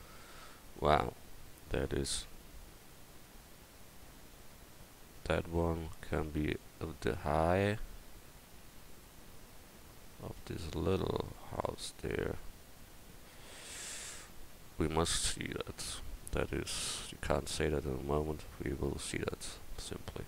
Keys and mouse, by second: 18.5 Tab.